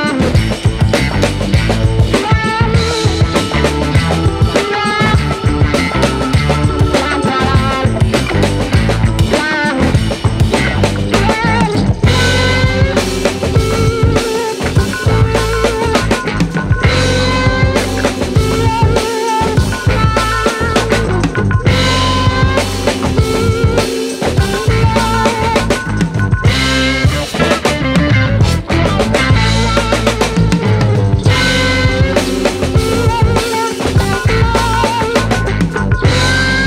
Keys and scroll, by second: 2.3 space, 18.1 space, 22.0 space.